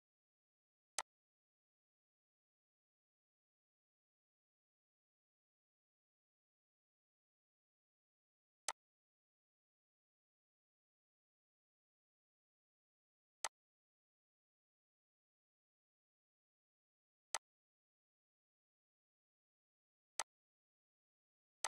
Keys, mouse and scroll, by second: 11.7-13.4 drag, 17.3 click, 20.1 click, 20.2 click.